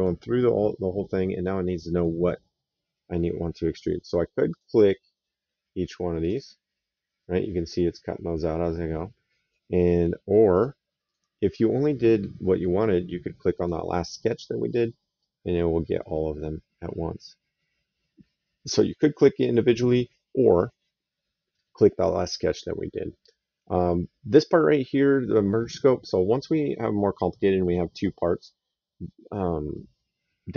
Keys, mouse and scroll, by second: 4.2 click, 6.0 click, 6.9 right click, 10.2 click, 13.3 click, 14.9 right click.